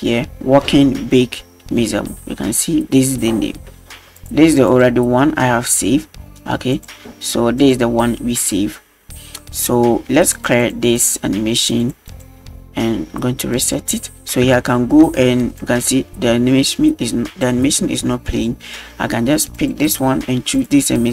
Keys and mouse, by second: 4.2-4.8 drag, 6.7-7.7 drag, 10.3 click, 10.6 click, 11.8 click, 12.1 click, 13.6 click, 14.6 shift+middle drag, 15.6 drag, 19.6 click, 20.6-21.1 drag.